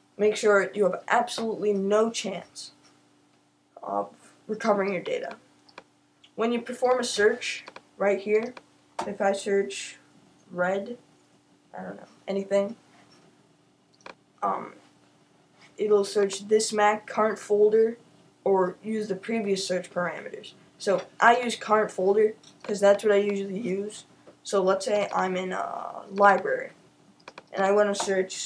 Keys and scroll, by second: 10.1-13.0 typing, 28.3-28.4 typing.